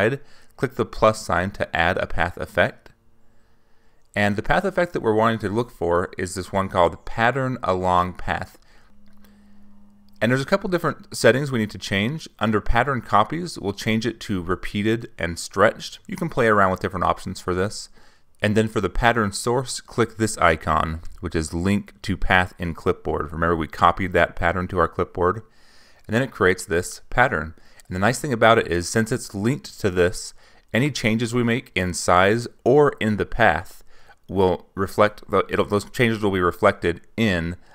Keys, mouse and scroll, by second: 3.7 click, 4.4 click, 4.6-6.1 typing, 10.9 click, 15.0 click, 19.5 click, 24.4 click, 30.5 click, 31.9-33.5 drag, 35.1-36.6 drag.